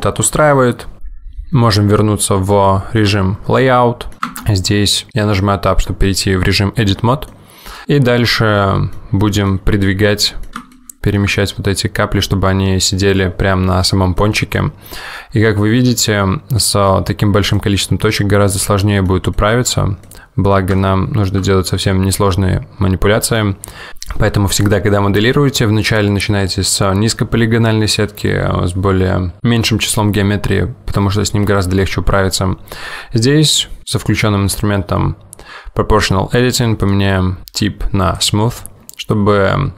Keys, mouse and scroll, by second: 3.1 click, 3.7 middle click, 4.2 middle click, 4.2 scroll up 2, 4.4 middle click, 4.5 Tab, 7.4 middle click, 8.4 middle click, 9.3 middle click, 9.9-10.7 scroll up 2, 10.2 middle click, 10.7 shift+middle click, 11.4 middle click, 14.3 middle click, 14.9-15.5 scroll up 2, 15.5 scroll down 1, 15.8-16.7 scroll down 5, 16.7 middle click, 17.6 click, 18.0-18.6 scroll up 2, 18.6 middle click, 19.4 middle click, 20.2 middle click, 20.9 shift+middle click, 21.5 middle click, 23.9 click, 36.9 click.